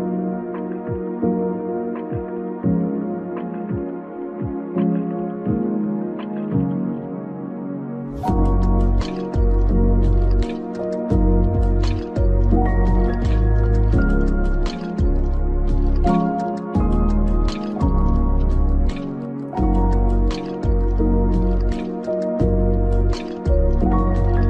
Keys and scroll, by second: 15.9 Down, 19.8 Down.